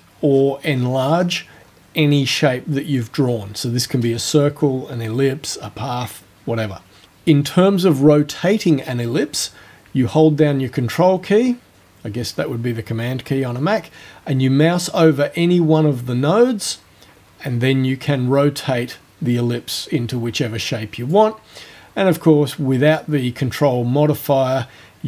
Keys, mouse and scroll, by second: 0.3-1.9 scroll down 8, 2.1-2.5 scroll down 2, 2.7 scroll down 2, 3.2 scroll down 2, 15.8-21.3 ctrl+drag, 23.0-25.0 drag.